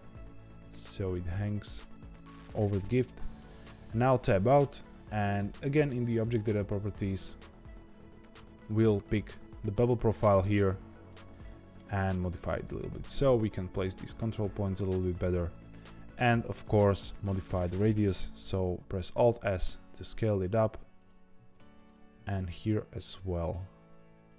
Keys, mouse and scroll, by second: 2.1-3.5 middle drag, 3.5 Tab, 6.9-9.0 scroll down 3, 9.0 click, 11.0 middle click, 11.9 Tab, 12.5 click, 12.9 g, 16.2 click, 16.6-19.1 middle drag, 19.1 alt+s, 20.9 click, 21.7 click, 22.2 alt+s.